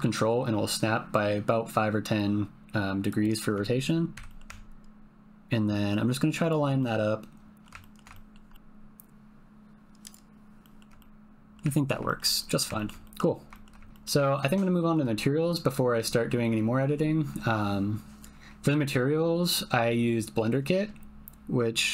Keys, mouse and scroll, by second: 4.1 g, 6.8 click, 7.8 ctrl+click, 8.2 shift+click, 8.5 ctrl+g, 10.0 click, 10.9 middle click, 11.8 ctrl+middle click, 12.5 middle click, 12.8 ctrl+middle click, 13.1 middle click, 13.6 shift+middle click, 13.9 shift+click, 14.2 ctrl+click.